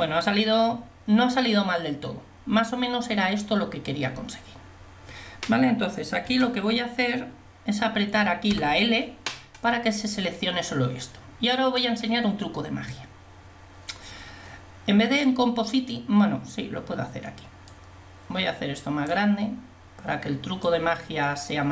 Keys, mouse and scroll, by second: 6.4 a, 8.6 l, 18.1 middle click.